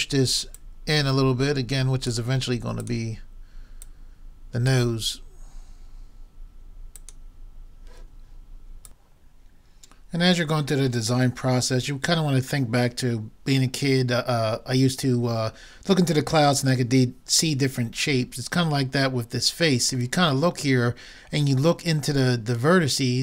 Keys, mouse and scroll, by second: 2.8-5.6 drag, 7.0-8.7 drag.